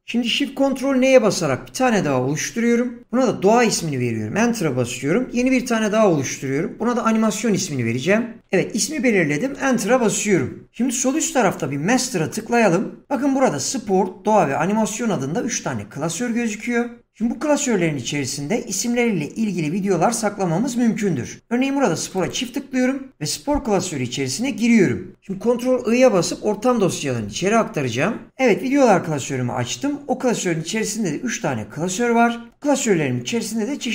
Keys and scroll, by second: 1.5 ctrl+shift+n, 3.7 Return, 5.4 ctrl+shift+n, 9.5 Return.